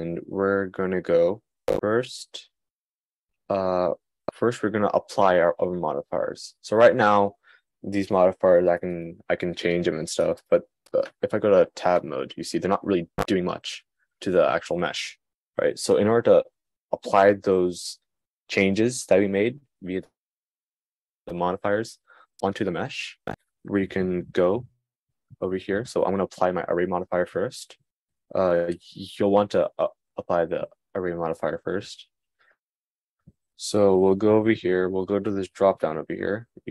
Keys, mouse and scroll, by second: 9.2-36.7 drag.